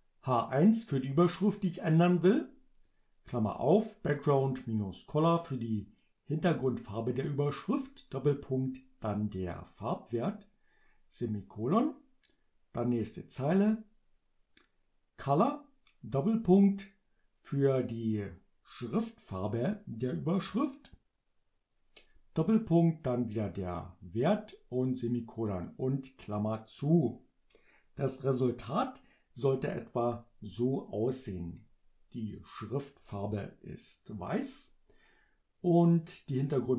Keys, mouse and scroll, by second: 0.3 click.